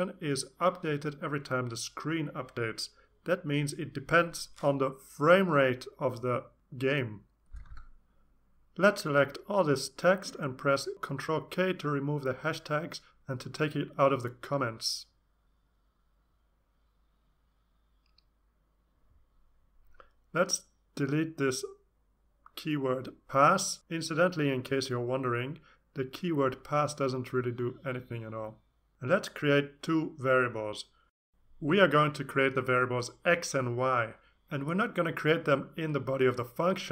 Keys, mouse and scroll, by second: 10.7 ctrl+k, 15.5 click, 19.4 BackSpace, 19.8 BackSpace, 20.9 BackSpace, 33.3-33.8 scroll up 2, 34.7 click, 35.7 Return, 35.8-36.9 typing.